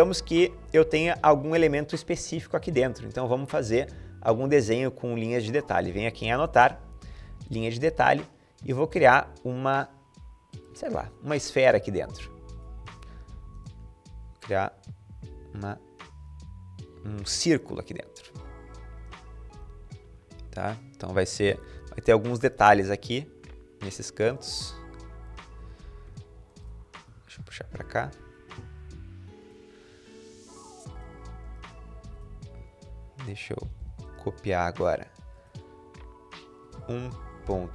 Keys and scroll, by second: 17.6 Escape, 18.2 Escape, 21.4 typing, 25.4 Escape, 25.8 Escape, 26.9 Down, 26.9-28.6 typing, 32.0-33.9 typing, 36.3-37.7 typing.